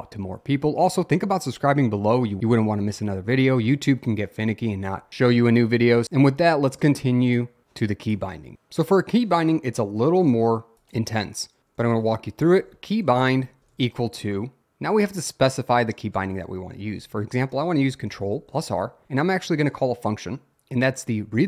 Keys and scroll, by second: 0.9 Return, 11.7-13.7 typing, 16.2-19.6 typing, 20.8-21.4 typing.